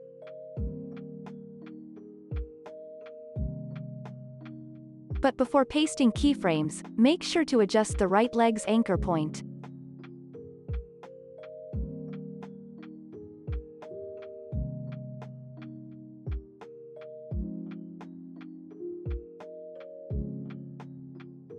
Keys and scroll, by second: 1.0 Escape, 3.6 ctrl+s, 5.5 space, 7.0 u, 7.3 y, 11.1 ctrl+s, 12.2 p, 12.8 ctrl+s, 13.3 v, 14.7-16.1 typing, 16.2 ctrl+s, 18.8 ctrl+c, 19.6 ctrl+v.